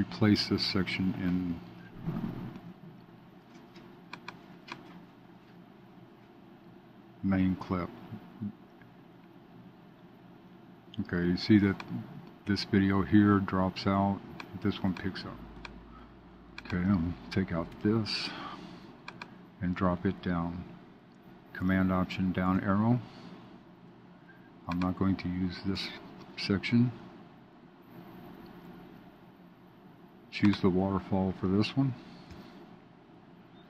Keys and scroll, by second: 22.5 alt+super+Down, 32.2 alt+super+Down.